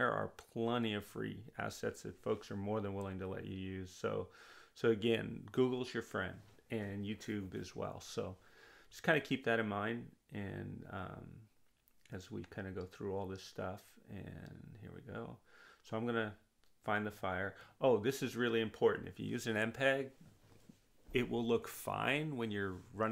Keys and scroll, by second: 0.2-1.4 typing, 1.6 Return.